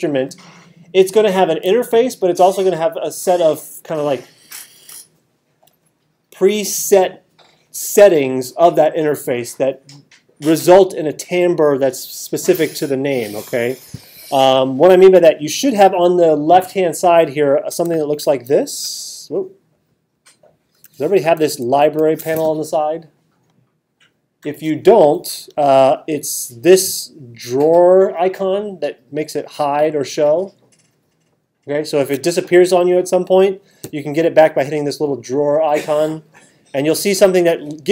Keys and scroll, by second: 18.5 alt+super+8, 21.4 alt+super+-.